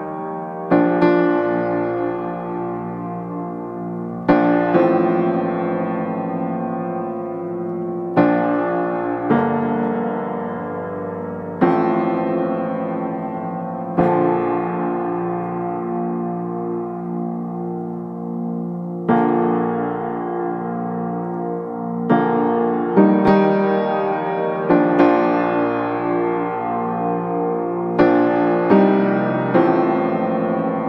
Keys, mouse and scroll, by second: 1.5-3.2 drag, 3.2 scroll down 1, 3.3-3.8 scroll up 1, 3.8 click, 4.7 scroll down 1, 4.9-5.6 scroll up 1, 5.6 click, 7.0 right click, 7.5 click, 8.1 click, 9.3 right click, 9.8 click, 10.1 middle click, 10.4 click, 10.6 right click, 10.9 click, 11.3 middle click, 11.7 scroll down 1, 11.8 scroll up 1, 11.9 click, 13.1 scroll down 1, 13.3-13.9 scroll up 2, 13.5 right click, 13.9 click, 15.6 scroll down 1, 15.7 scroll up 1, 16.8-19.4 drag, 20.6 scroll down 1, 20.7-21.1 scroll up 1, 21.1 click, 21.2 right click, 22.4 click, 22.7 middle click, 23.0 click, 23.2 right click, 23.5 scroll up 1, 23.6-29.1 drag, 30.1-30.6 scroll up 1, 30.6 click.